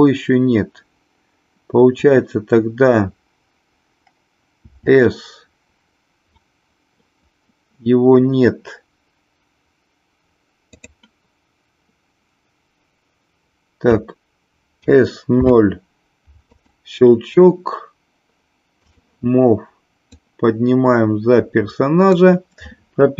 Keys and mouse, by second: 4.5 s, 10.6 click, 14.7 s, 15.2 s, 15.4 KP_0, 16.5 click, 18.7 click, 20.2-22.1 drag.